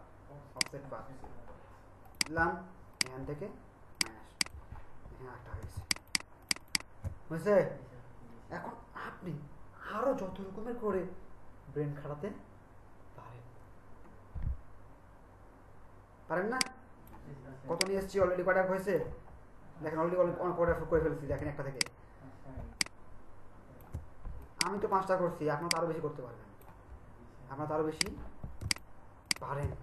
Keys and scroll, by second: 5.7 ctrl+alt+space, 21.4 ctrl+alt+space, 28.6 ctrl+space.